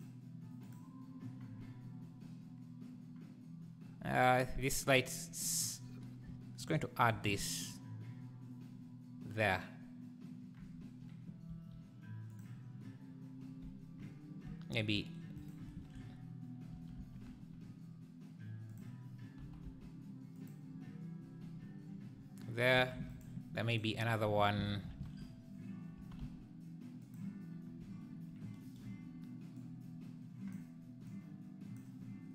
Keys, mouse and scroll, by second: 0.7 click, 6.7-7.1 shift+right drag, 7.1 shift+s, 11.5 s, 15.4-15.7 shift+right drag, 15.7 shift+s, 16.7 s, 19.9 g, 23.0 shift+d, 23.7-24.9 shift+right drag, 25.1 shift+s, 26.0 s, 27.6 scroll down 1, 29.6 click, 31.1 click.